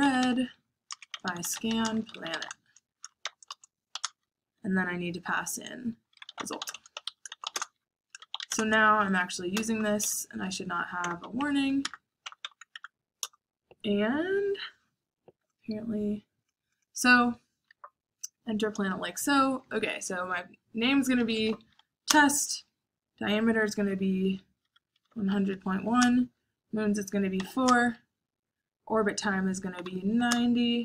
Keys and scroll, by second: 0.0-4.4 typing, 5.9-9.0 typing, 9.5 Return, 10.4-12.9 typing, 13.0 Tab, 13.2 Return, 14.0-14.7 typing, 20.9-22.1 typing, 24.3-27.8 typing, 29.7-30.5 typing.